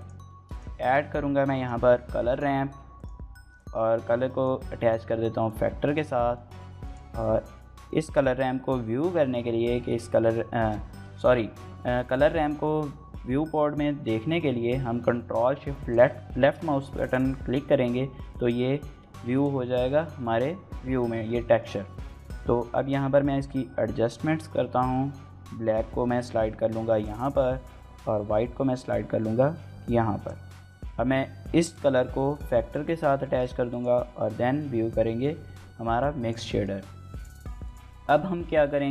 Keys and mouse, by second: 7.2-38.9 middle drag, 7.2 g.